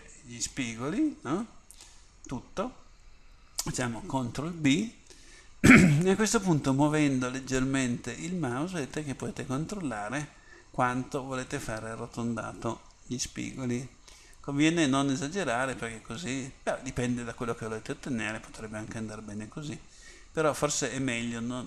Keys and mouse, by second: 0.6-2.0 middle drag, 4.5 ctrl+b.